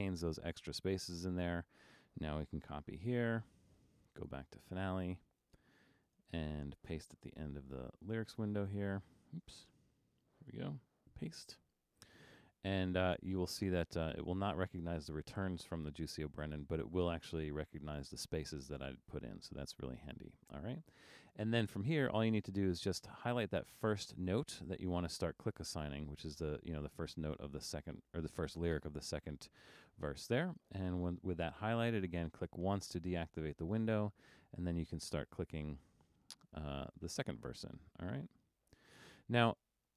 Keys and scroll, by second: 3.0 super+c, 7.4 Down, 8.5 Return, 9.6 BackSpace, 11.2 super+v.